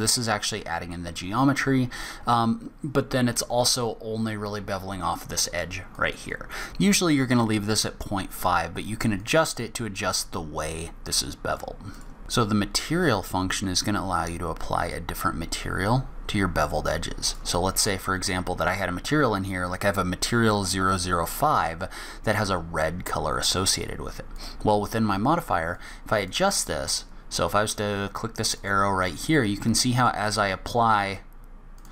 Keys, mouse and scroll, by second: 6.0 click, 9.2 click, 11.9 click, 17.3 click, 24.3 click, 25.7 click, 28.6 click, 29.1 click, 30.0 click, 31.8 click.